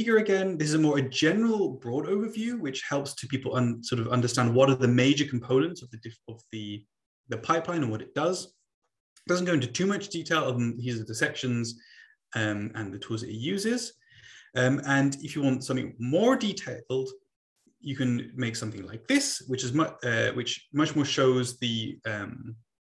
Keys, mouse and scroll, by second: 16.9 Right.